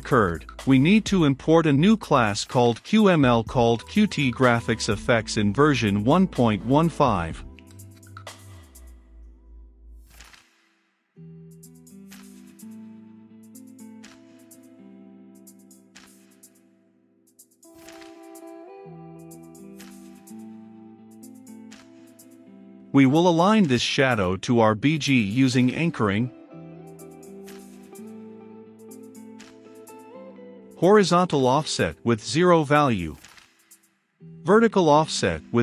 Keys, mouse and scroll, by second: 9.1 ctrl+x, 10.1 Return, 10.5 click, 11.2 Return, 11.6 ctrl+v, 13.2-20.7 drag, 20.4-26.4 typing, 22.1 Return, 23.3 Return, 25.3 ctrl+space, 26.8 click, 27.7 Return, 28.2-30.6 typing, 32.1 Down, 32.3 Return, 33.6-34.9 typing, 35.0 Down, 35.1 Return.